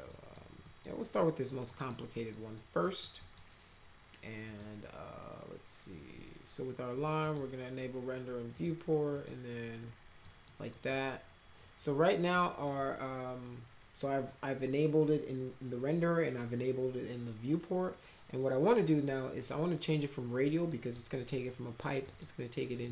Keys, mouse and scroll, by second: 0.1 middle click, 0.6 middle click, 1.1 middle click, 1.7 middle click, 2.3 middle click, 2.8 middle click, 3.2 middle click, 4.4 click, 7.2 click, 8.5 click, 9.1 click, 10.2 middle click, 10.7 middle click, 12.3 middle click, 20.7 middle click, 22.0 click, 22.8 middle click.